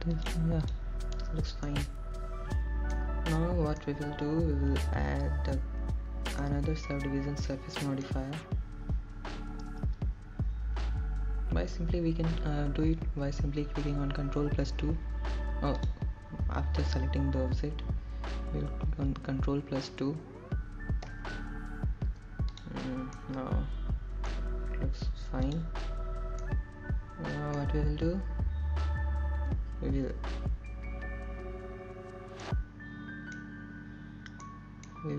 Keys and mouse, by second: 1.3 g, 2.2 x, 3.2 click, 3.7 click, 4.7-6.0 middle drag, 6.8-9.5 middle drag, 10.5 middle click, 17.5 ctrl+2, 18.8 click, 24.2 ctrl+2, 26.2-27.3 middle drag, 28.5 click, 29.4-30.6 middle drag.